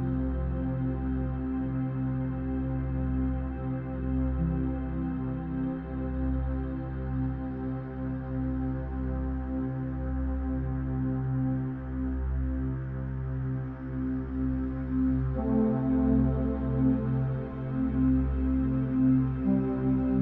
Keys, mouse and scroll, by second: 0.3-5.2 drag, 5.5 click, 12.9 click, 14.4 click, 16.3-17.3 drag.